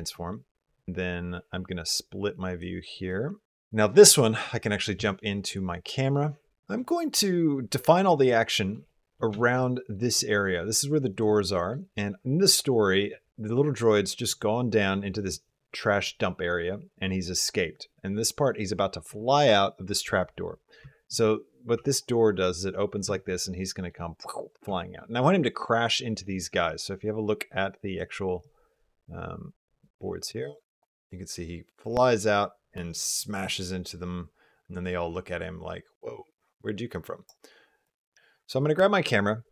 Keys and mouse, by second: 1.3-2.4 drag, 3.1 click, 3.4 t, 3.4 KP_0, 7.6 middle click, 7.7 click, 7.8-8.1 middle drag, 8.3 shift+middle drag, 8.7 middle click, 8.8 click, 9.2 shift+middle click, 11.3 middle click, 12.3 middle click, 13.6 middle click, 13.8 click, 14.1 middle click, 20.6 g, 23.5 middle click, 24.6 shift+middle click, 27.4 click, 29.3 click, 30.2-37.1 drag, 37.7 click, 38.3-39.2 middle drag, 39.3 middle click.